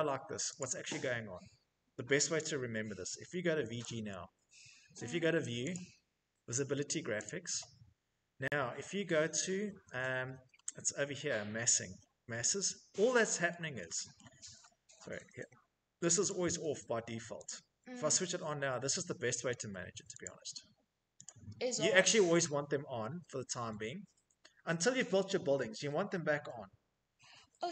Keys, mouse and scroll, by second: 0.1 click, 2.9-3.9 typing, 4.7 Escape, 5.2 click, 6.8 click, 8.7-10.4 scroll, 11.1-13.0 scroll, 13.0-15.8 scroll, 15.8 click, 16.9 click, 19.7 click, 20.7 click, 22.5 middle click, 22.7 middle click, 23.4-24.2 scroll.